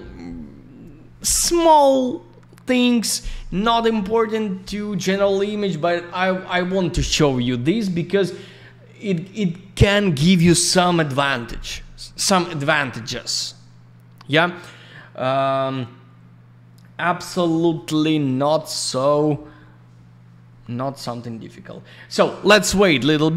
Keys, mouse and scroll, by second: 7.9 scroll up 1, 9.0 scroll down 1, 14.9 scroll up 1, 16.3 scroll down 1, 21.2 scroll up 1, 22.1 scroll down 1.